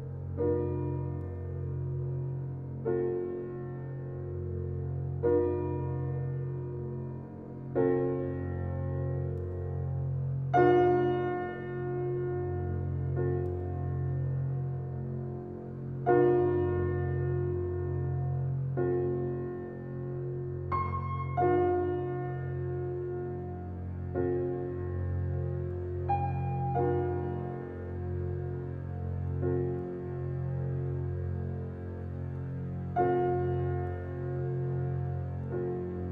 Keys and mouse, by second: 0.9 click, 3.6 alt+click, 3.9 alt+middle click, 4.1-4.8 typing, 5.0 click, 5.3 middle click, 6.0 alt+click, 7.3-8.0 typing, 8.0-10.6 alt+drag, 11.2-12.7 shift+drag, 12.0-13.4 typing, 14.6-16.3 drag, 16.2-17.0 typing, 18.1-19.3 alt+drag, 19.8 typing, 20.3-21.4 alt+middle drag, 21.4 alt+click, 22.3 typing, 23.1-24.2 drag, 25.8 alt+click, 26.2 typing, 26.5-27.7 alt+drag, 28.0 g, 29.5 click, 29.6-31.7 typing, 31.0 alt+click, 33.0 alt+a, 33.5-35.9 alt+drag, 35.9 alt+middle click.